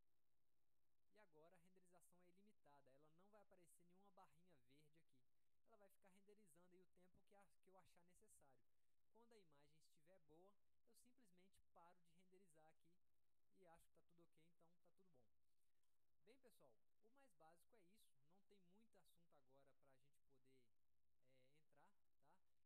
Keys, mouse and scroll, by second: 2.0 click.